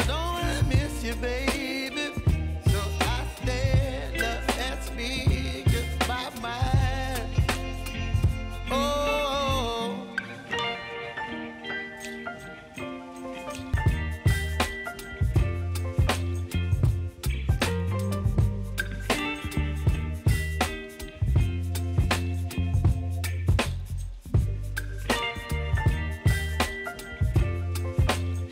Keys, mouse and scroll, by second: 0.2 Left, 0.7 -, 1.0 Return, 1.7 space, 3.4-4.7 drag, 5.5 space, 8.3 space, 8.9 click, 10.2 ctrl+a, 11.2 p, 12.1 click, 12.9-13.4 typing, 14.9 click, 16.2 j, 19.3-22.1 drag, 22.1 scroll down 1, 23.6-28.5 drag.